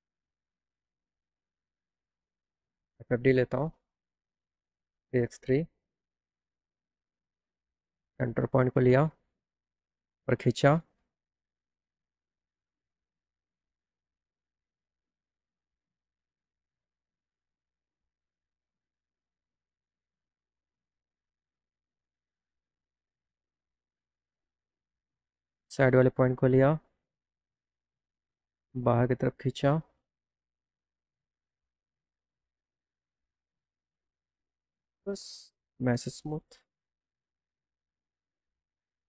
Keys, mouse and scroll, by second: 0.9 right click, 1.4 click, 2.5 click, 3.3 f, 4.4 click, 6.1 click, 6.5 click, 8.6 click, 9.8-11.4 drag, 11.7 scroll down 1, 12.7-13.3 scroll down 1, 13.5-15.2 drag, 24.4 right click, 27.2 click, 28.0 click, 28.2 click, 29.7-32.7 drag, 34.4 click, 34.8 click, 36.1 m, 36.5 m, 37.4 click, 39.0 click.